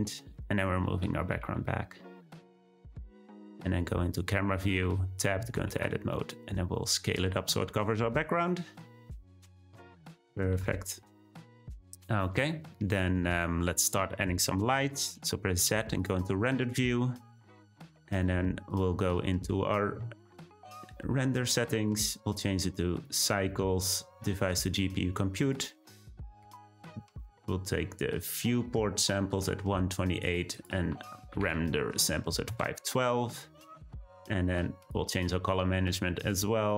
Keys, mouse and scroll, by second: 0.0-1.3 scroll down 8, 1.3 g, 4.7 Tab, 5.5 a, 5.7 s, 9.8 click, 10.1-10.5 scroll up 2, 10.5 Tab, 11.2-11.8 scroll down 1, 12.0 click, 13.0 scroll up 1, 15.1 z, 18.7 click, 21.8-28.4 drag, 30.5-33.4 drag, 33.4-34.8 scroll down 8, 34.8-35.2 drag, 35.2-36.6 scroll down 1, 36.6-36.7 scroll down 8.